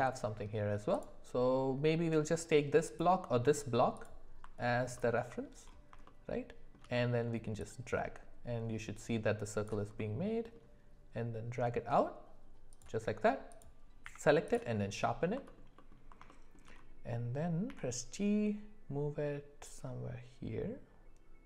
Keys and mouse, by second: 2.8 click, 3.9 click, 4.7 alt+middle click, 6.0 shift+middle click, 6.4 shift+click, 7.7-12.8 drag, 10.0-12.8 middle drag, 14.0 q, 15.4 alt+middle click, 15.7 alt+middle click, 16.3 shift+middle click, 17.6 g.